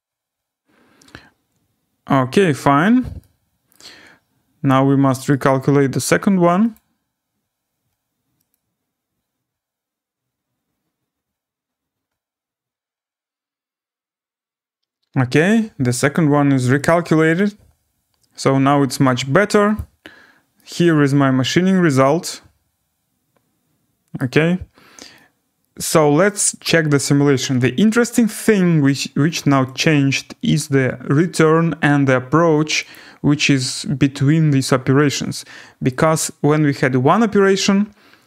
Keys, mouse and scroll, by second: 3.7 alt+right click, 3.9 scroll down 3, 4.0-4.4 scroll, 5.3 right click, 5.5 scroll, 6.7 click, 8.5 click, 14.6-15.8 scroll, 16.8 click, 18.1 scroll down 8, 19.0 right click, 19.7 click, 20.2 scroll, 20.8 scroll down 4, 23.9-24.6 scroll down 6, 24.1 right click, 24.8 scroll up 4, 25.2 scroll, 26.3 right click, 28.0 click, 29.7 scroll down 4, 29.8 click, 32.9 click, 36.0 click, 36.8 scroll.